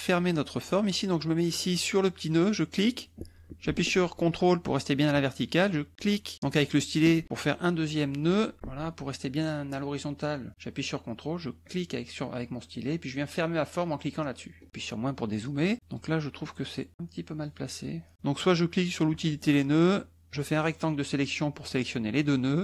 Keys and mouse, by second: 2.7 click, 5.9 ctrl+click, 6.4 ctrl+click, 8.1 click, 11.6 ctrl+click, 14.2 ctrl+click, 14.7 KP_Subtract, 19.1 click, 20.3-21.5 drag.